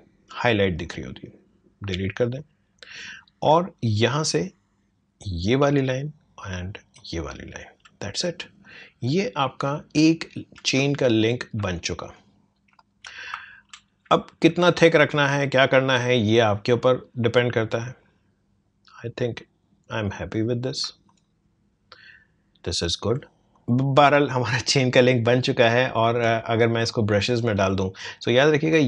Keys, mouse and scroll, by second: 0.8 alt+click, 5.5 alt+click, 9.6-10.0 alt+scroll down 1, 10.8 space, 11.0 click, 11.3 space, 12.1 click, 13.3 alt+scroll up 1, 14.6-21.1 shift+drag, 22.1 alt+scroll down 1, 22.6-23.1 alt+scroll up 1, 23.5 click, 26.7-28.8 drag.